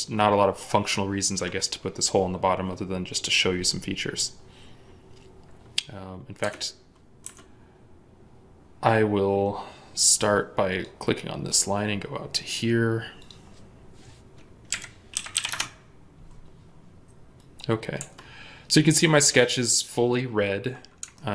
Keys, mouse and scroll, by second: 5.8 scroll down 1, 6.3 Escape, 9.7-11.0 scroll down 1, 11.0-11.3 scroll up 1, 14.6-15.4 typing, 15.4 Return, 17.9 Escape, 18.3 scroll up 1, 21.0 ctrl+middle click.